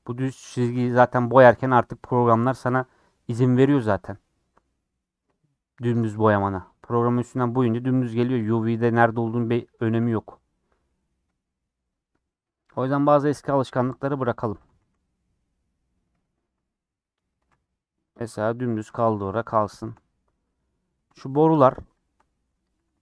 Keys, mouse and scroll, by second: 0.7-1.6 scroll down 4, 0.9 middle click, 4.1 scroll up 3, 4.4 scroll down 4, 4.5 middle click, 4.9 scroll up 5, 6.5 scroll down 3, 10.1 n, 12.2-12.6 scroll down 5, 12.9 Tab, 14.6 Tab, 14.8 a, 18.9 Tab, 19.2 h, 19.8 shift+middle click, 20.6 click, 20.9 scroll up 3, 21.6 shift+middle click, 21.9 shift+click, 22.8 ctrl+j.